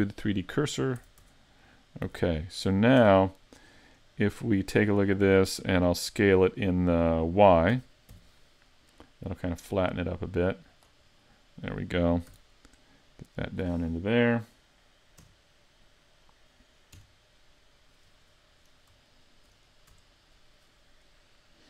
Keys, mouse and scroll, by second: 1.0 a, 1.2 Tab, 2.1 z, 2.4 middle click, 3.0 Tab, 4.2 right click, 4.8 middle click, 7.7 s, 10.8 click, 11.2 middle click, 12.3 s, 13.6 click, 15.2 KP_3, 17.0 KP_1, 18.6-19.1 scroll up 4, 19.1 shift+middle click, 19.7-20.1 scroll up 1, 20.1 shift+middle click.